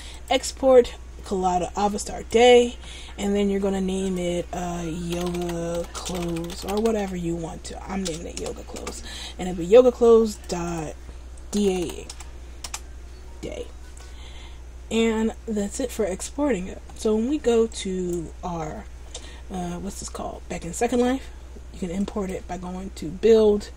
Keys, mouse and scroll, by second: 15.0 Return.